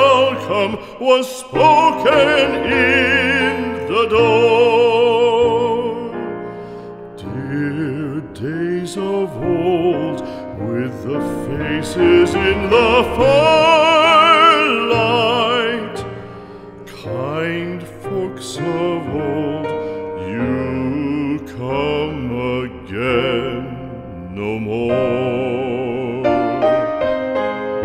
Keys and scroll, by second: 0.2 shift+Down, 1.1 Up, 3.1 Right, 3.6 Up, 8.1 shift+Down, 8.8 Right, 12.9 Return, 14.3 ctrl+Up, 21.3 space.